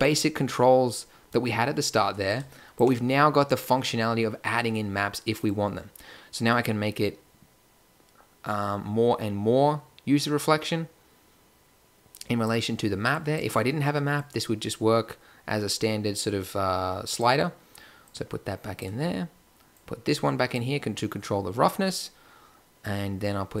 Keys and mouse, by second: 2.3-3.9 drag, 13.1-14.3 drag, 17.9-19.7 drag.